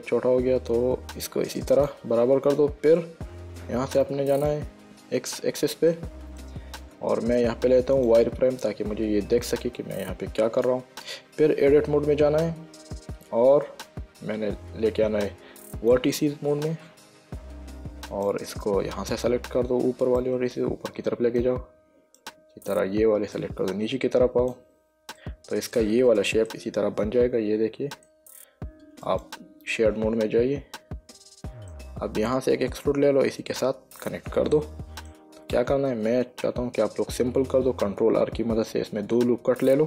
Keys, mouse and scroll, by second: 2.0 click, 4.3 click, 6.2 shift+middle click, 8.3 click, 9.8 click, 12.0 Tab, 16.1 click, 18.6 click, 20.5 click, 22.5 click, 23.7 click, 25.5 middle click, 26.8 middle click, 29.4 click, 30.0 middle click, 34.9 middle click, 38.1 ctrl+r.